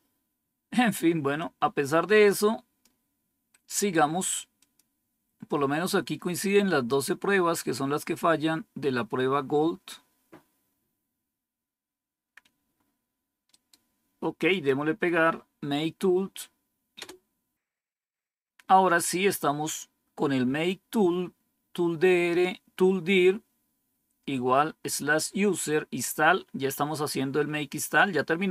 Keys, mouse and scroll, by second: 1.3-2.8 drag, 3.4 right click, 4.5 click, 13.4 right click, 14.4 click, 16.9 Return.